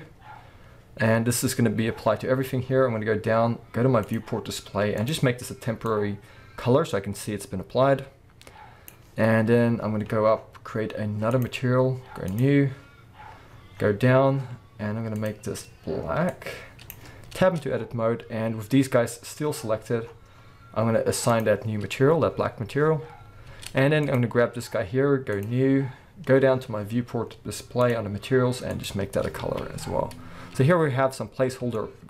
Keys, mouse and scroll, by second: 2.0-2.7 scroll down 2, 2.7-4.0 scroll down 1, 4.3-5.0 scroll down 2, 9.8-10.6 scroll up 2, 10.6-11.3 scroll up 1, 11.3-15.2 drag, 13.5-15.1 scroll down 2, 17.4 Tab, 17.8-21.3 scroll up 1, 21.3-24.2 drag, 22.5-23.2 scroll down 1, 23.2-23.5 scroll up 1, 23.5 Tab, 25.3-27.9 drag, 26.3-26.6 scroll down 1, 29.4 alt+a, 29.6 alt+scroll down 1, 29.8-32.0 middle drag.